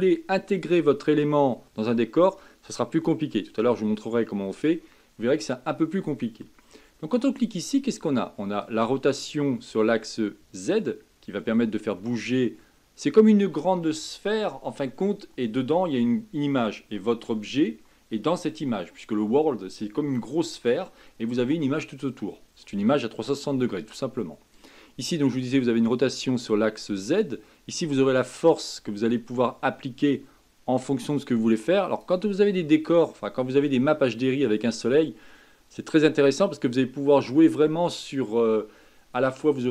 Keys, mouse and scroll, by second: 7.4-10.4 drag, 24.5-27.5 drag.